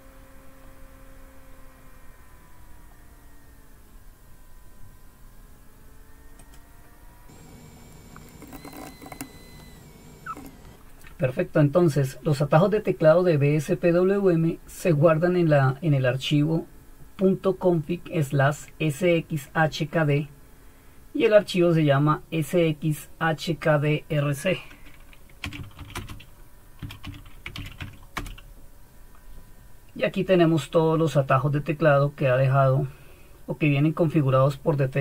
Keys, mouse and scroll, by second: 6.4-8.4 drag, 8.1-9.6 typing, 25.9-28.0 typing, 28.1 Return, 31.3 typing.